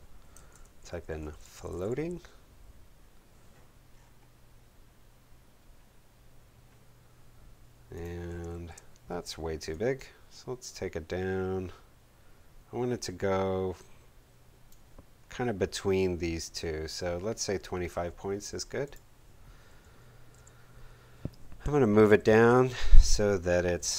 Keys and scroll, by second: 0.5-2.2 typing, 8.5 shift+super+a, 20.3 shift+v, 22.0 shift+Down.